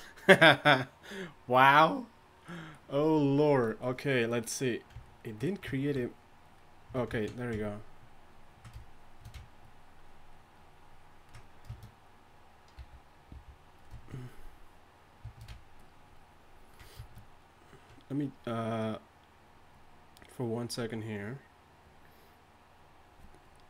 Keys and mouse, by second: 12.8 d, 13.3 f.